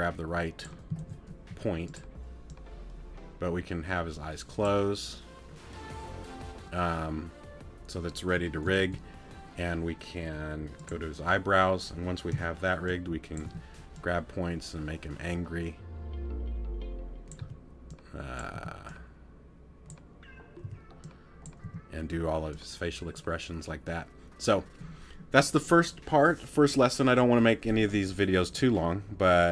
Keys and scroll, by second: 12.3 g, 17.4 g, 18.5 t, 20.6 g.